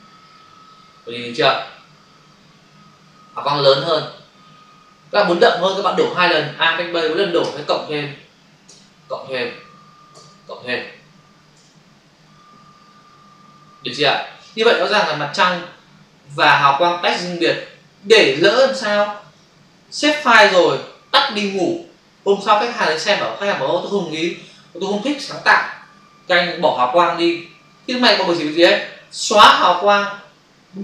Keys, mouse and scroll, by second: 7.3 alt+BackSpace, 11.6 ctrl+d, 17.3 click, 19.2 ctrl+z, 20.3 ctrl+s, 29.4 Delete.